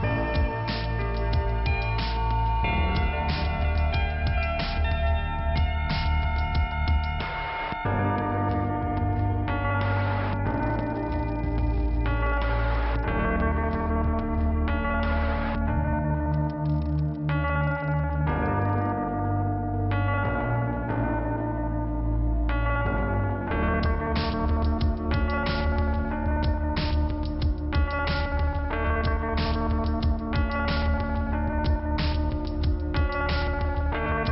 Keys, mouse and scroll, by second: 6.5 click, 6.7 click, 6.8 double click, 6.9 double click, 7.1 double click, 7.2 double click, 7.2 double click, 7.4 double click, 7.5 double click, 7.6 double click, 8.1 click, 8.5 click, 8.5 double click, 8.7 double click, 9.1 double click, 9.2 double click, 9.4 double click, 9.5 double click, 9.7 double click, 9.7 double click, 9.8 double click, 10.0 double click, 10.1 double click, 10.2 double click, 10.3 double click, 10.3 double click, 13.6 scroll down 2, 15.5 click, 16.5 click, 17.3-17.9 scroll up 1, 17.9 right click, 18.8 click, 20.6 click, 22.9 click, 23.2 click, 23.5 click, 23.8 right click, 24.5 right click, 25.6 click, 26.8 click, 28.4 scroll up 2, 32.0 click.